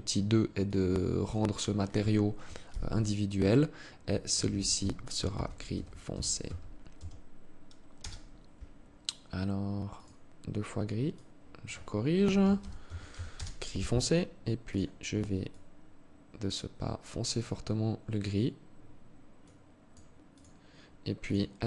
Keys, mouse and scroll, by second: 9.4 click, 14.1 click, 20.7 click, 21.3 Tab.